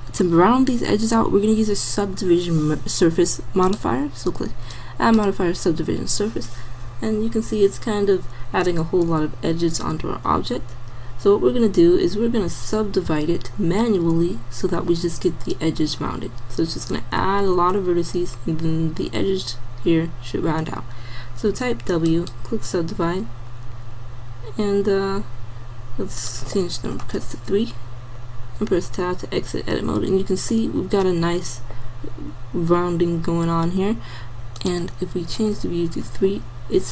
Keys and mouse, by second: 3.7-5.2 drag, 7.6-10.0 middle drag, 10.0 Tab, 11.1 middle click, 12.5 a, 13.1 a, 21.5 w, 23.2-24.8 middle drag, 28.2 middle click, 28.6 Tab, 36.5 middle click.